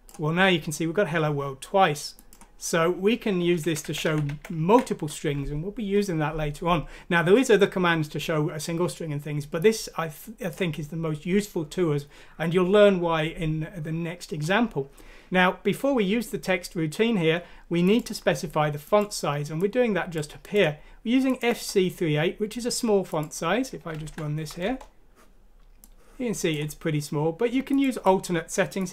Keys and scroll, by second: 3.4 ctrl+z, 3.6-4.3 typing, 24.0 F6, 24.6 Return.